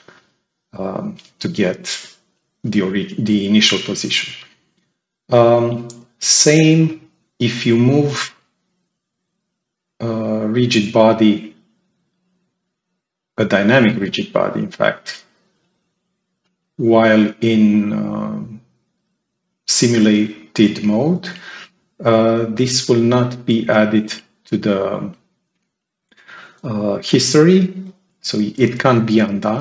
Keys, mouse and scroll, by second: 6.3-13.8 drag, 14.5-15.1 drag, 16.3-18.1 drag, 21.6-22.3 drag.